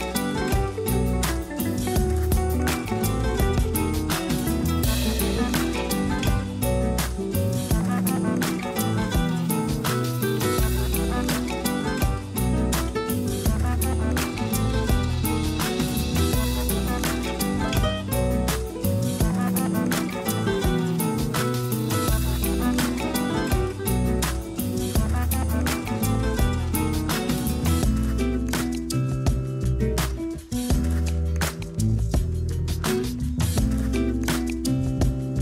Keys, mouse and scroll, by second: 1.5-2.2 scroll up 4, 2.2 click, 2.9-3.7 scroll down 5, 3.7 g, 5.7 click, 6.1 scroll up 2, 6.3 Tab, 6.7 a, 6.9 a, 7.1 z, 7.7 a, 8.7 click, 9.9 scroll up 1, 10.2 g, 12.1-13.6 typing, 16.0 scroll up 1, 16.4 g, 17.7 scroll up 1, 19.0 a, 19.1 a, 19.6 ctrl+r, 21.4 scroll down 3, 21.6 a, 21.8 a, 22.0 z, 22.5 Tab, 22.7 scroll down 2, 23.1 a, 23.6-24.0 middle drag, 24.0 scroll up 1, 24.8-25.6 middle drag, 25.6 scroll down 1, 26.2-26.6 shift+middle drag, 26.6 scroll up 1, 26.9 Tab, 27.9 ctrl+r, 29.9 scroll down 1, 30.1 a, 30.3 a, 30.7 a, 31.1 KP_1, 31.7 scroll up 2, 32.2 shift+middle click, 32.9 g, 34.3 scroll up 3, 34.7 z.